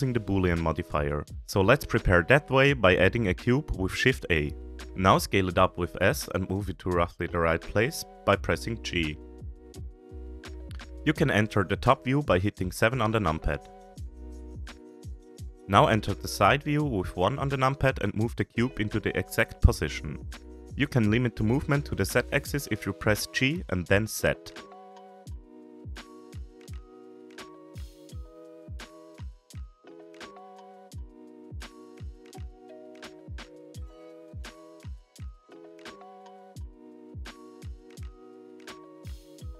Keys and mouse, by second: 1.0 Tab, 1.7 shift+middle click, 2.4 shift+a, 5.8 s, 10.7 KP_7, 11.9 g, 13.5 middle click, 14.0 s, 15.1-15.9 middle drag, 16.5 KP_1, 18.3-18.7 shift+middle drag, 19.8 g, 22.0-22.4 shift+middle drag, 24.9 g, 29.1-29.4 shift+middle drag, 31.4 g, 35.5-35.8 shift+middle drag, 37.2-38.2 drag.